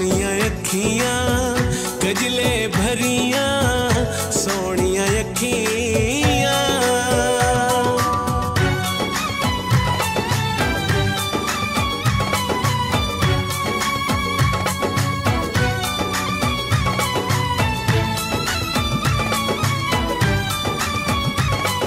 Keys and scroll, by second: 0.8 l, 2.0 w, 3.5-6.6 typing, 7.6 space, 9.2 r, 13.2 d, 13.8 BackSpace, 14.0 shift+d, 15.9 d, 16.7 BackSpace, 17.0 shift+d, 18.8-21.2 typing.